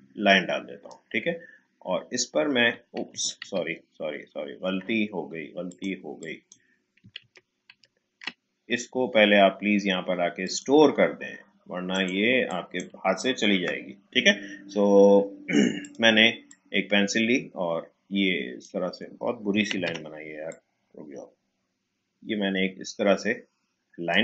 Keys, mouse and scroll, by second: 3.4 ctrl+z, 5.6 click, 7.2 ctrl+z, 10.4 click, 13.5 Delete, 15.8-19.7 drag, 19.7 ctrl+z, 20.4-24.2 drag.